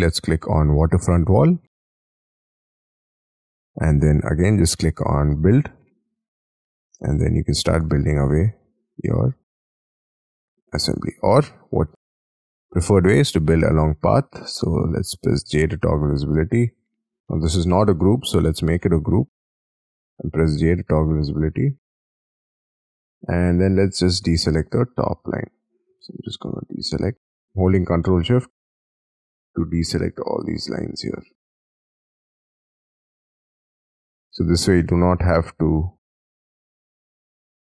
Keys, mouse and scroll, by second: 2.6 middle click, 6.0 scroll down 4, 6.5-7.1 scroll up 10, 8.3 middle click, 8.7-9.6 scroll down 6, 9.6 middle click, 10.9 space, 11.1-11.4 scroll down 5, 11.5 ctrl+z, 11.9 scroll down 1, 12.0 middle click, 12.8 middle click, 12.8 scroll up 4, 13.6 double click, 14.8 j, 15.3-16.4 scroll down 19, 16.4-17.3 scroll up 17, 17.3 middle click, 17.8 g, 18.2-18.7 scroll up 5, 18.7 double click, 19.1 double click, 19.3-20.0 scroll down 6, 20.0 j, 20.6 scroll down 9, 21.0 alt+w, 21.2 alt+t, 21.6 alt+w, 22.0-22.6 scroll down 10, 22.6-23.9 scroll up 17, 23.9 ctrl+shift+click, 24.7 ctrl+shift+click, 25.5-26.2 ctrl+shift+scroll down 12, 26.2-27.2 ctrl+shift+scroll up 5, 27.2 ctrl+shift+click, 28.0-28.4 ctrl+shift+scroll down 6, 28.4-29.2 ctrl+shift+scroll up 10, 29.2-29.6 ctrl+shift+scroll down 6, 29.8 ctrl+shift+scroll up 8, 30.8 ctrl+shift+click, 32.0-32.5 ctrl+shift+scroll down 7, 32.5 ctrl+shift+scroll up 1, 32.6-33.3 ctrl+shift+scroll down 12, 33.3-34.0 ctrl+shift+scroll up 8, 34.0 ctrl+shift+scroll down 4, 34.3-35.0 ctrl+shift+scroll up 4, 35.0 ctrl+shift+click, 36.0 ctrl+shift+scroll up 1, 36.3-36.6 ctrl+shift+scroll down 5, 36.6 ctrl+shift+scroll up 2, 36.8 ctrl+shift+click, 37.5 ctrl+shift+click.